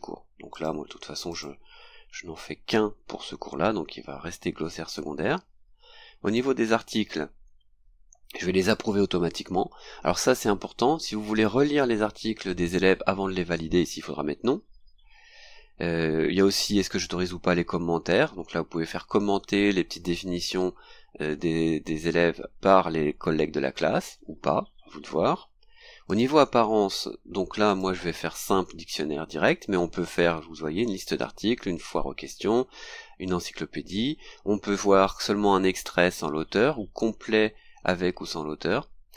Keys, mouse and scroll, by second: 0.5 click, 1.3 click, 5.2-6.2 scroll down 2, 6.2 click, 7.3-25.1 scroll down 2, 25.1 scroll down 1, 26.1 click, 26.6-26.9 scroll down 2, 27.6 click.